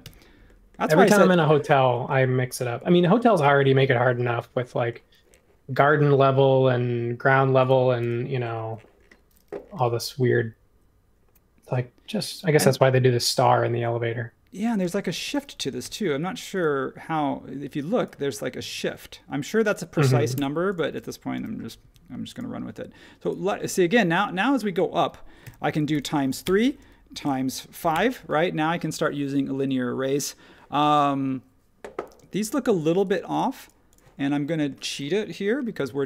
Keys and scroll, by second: 0.0 m, 8.0 super+1, 9.7 m, 14.8 space, 15.8 |, 18.6 space, 20.3 BackSpace, 21.3 m, 25.4 x, 26.4 Return, 27.2 x, 27.8 5, 27.9 Return, 32.2 space, 35.8 s.